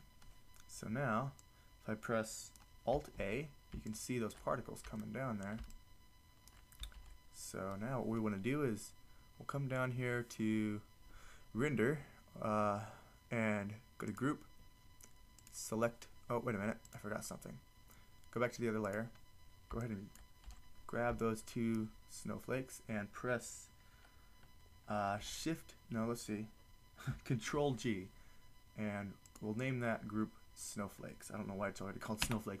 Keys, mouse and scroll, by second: 1.5 click, 3.2 alt+a, 7.2 alt+a, 20.5 a, 25.2 shift+g, 27.5 ctrl+g, 29.9-32.2 drag.